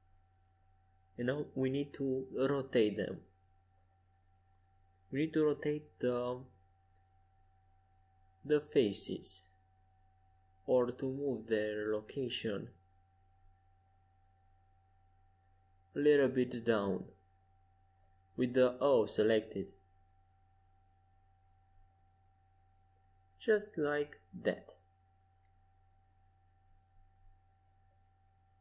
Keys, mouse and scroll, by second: 2.9 e, 6.2 g, 10.7 a, 13.2-15.0 drag, 14.8 c, 18.1 a, 18.8 c, 23.2 g, 28.0 Escape, 28.5 a.